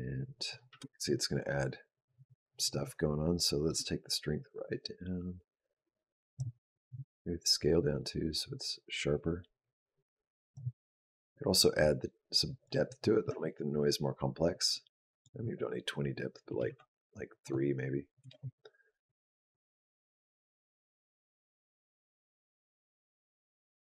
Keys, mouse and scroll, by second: 0.5 space, 3.5 click, 6.7 click, 11.6 click, 14.9 click, 16.5 KP_3, 17.2 click.